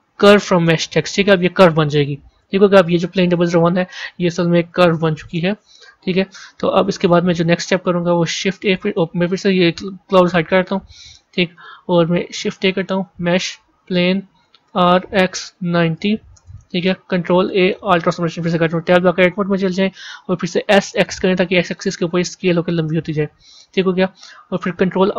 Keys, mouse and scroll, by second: 3.2 click, 3.4-6.4 drag, 6.7-8.3 middle drag, 8.3 shift+a, 9.9 click, 11.1 KP_1, 12.2 shift+a, 14.6 r, 17.1 ctrl+a, 18.9 b.